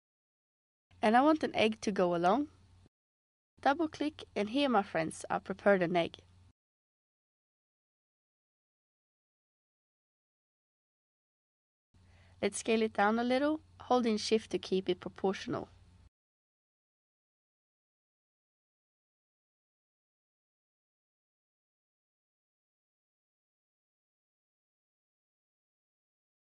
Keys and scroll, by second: 25.5 r.